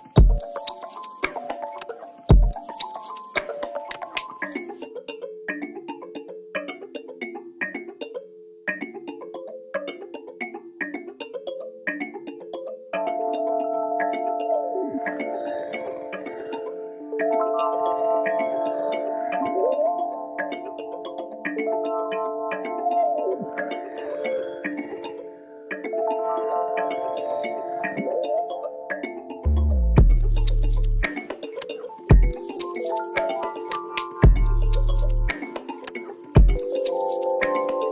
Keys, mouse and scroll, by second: 0.8 shift+click, 1.0 middle click, 1.3 s, 2.0 middle click, 2.7 click, 3.2 middle click, 3.8 click, 4.8 middle click, 5.3 ctrl+z, 6.1 click, 6.5 ctrl+z, 8.3 middle click, 8.8 click, 9.0-10.3 middle drag, 10.3-11.8 drag, 14.3 middle click, 15.2 ctrl+click, 15.5-18.5 middle drag, 16.1 s, 18.5 click, 19.5 middle click, 20.2 click, 20.4 middle click, 20.9 shift+click, 21.1-22.1 middle drag, 22.1-23.1 drag, 23.1 middle click, 23.6 click, 24.2 middle click, 24.8-26.9 drag, 26.9-29.1 middle drag, 27.5 scroll down 2, 28.1-28.4 scroll up 2, 29.1-30.9 drag, 30.9-32.9 middle drag, 32.9 click, 34.2 middle click, 34.8 shift+click, 36.2-37.9 middle drag.